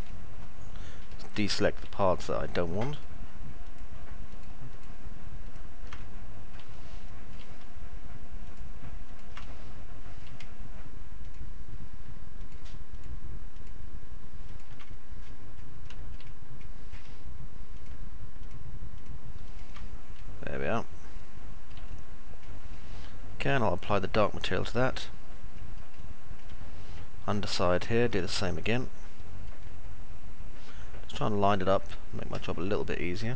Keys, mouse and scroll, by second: 1.1 alt+middle click, 2.4 ctrl+click, 2.8 ctrl+click, 3.6 ctrl+click, 4.1 ctrl+click, 4.6 ctrl+click, 5.4 ctrl+click, 5.9-7.1 alt+middle drag, 8.4 ctrl+click, 8.9 ctrl+click, 9.4 alt+middle click, 12.8 ctrl+click, 14.4 ctrl+click, 15.1 middle click, 16.6 middle click, 19.4 ctrl+click, 19.9-21.6 alt+middle drag, 22.4 alt+middle click, 25.9-28.4 alt+middle drag, 28.8-32.1 middle drag, 28.8-30.6 scroll up 3, 32.3 alt+middle click.